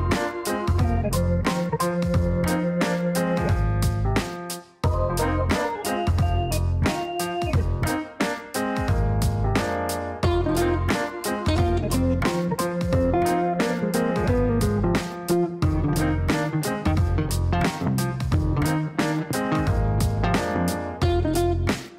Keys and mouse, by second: 1.6 click, 3.1 click, 5.5 click, 6.4 click, 7.3 click, 8.8 click, 9.5 click, 9.6 Up, 10.4-11.6 typing, 16.6-17.4 typing, 17.5 Down, 17.6 Down, 17.8 Down, 17.9 Down, 18.1 Down, 18.3 Down, 18.6 Return, 19.4 Return, 21.5 click.